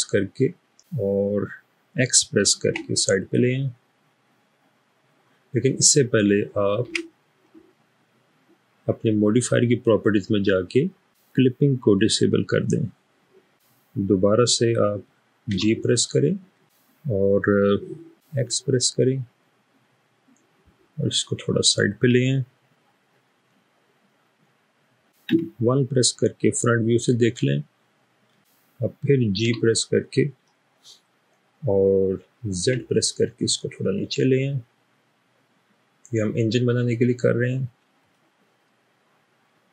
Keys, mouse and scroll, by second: 2.7 typing, 6.9 Escape, 11.2 typing, 15.8 typing, 18.5 x, 25.3 1, 29.5 g, 32.6 z, 33.6 typing, 38.0 click, 39.5-39.7 scroll down 1.